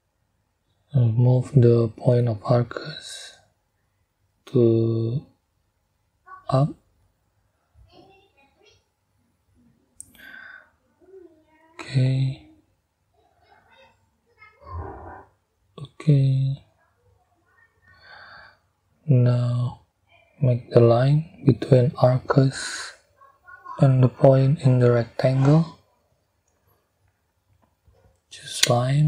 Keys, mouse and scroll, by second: 0.6-1.9 drag, 2.9-4.0 drag, 5.5-8.1 drag, 8.5 right click, 9.7 click, 10.6-11.6 middle drag, 13.4-15.8 middle drag, 16.7-17.1 scroll down 2, 17.4 scroll up 2, 28.0 middle click.